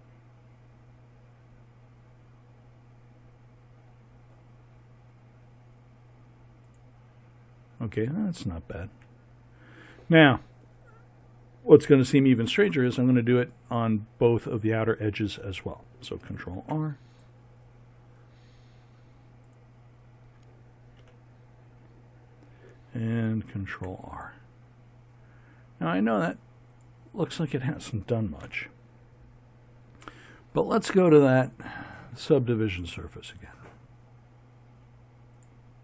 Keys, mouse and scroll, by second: 8.9 a, 16.4 ctrl+r, 21.0 a, 23.6 ctrl+r, 28.4 a, 31.5-33.4 drag, 35.3-35.8 drag.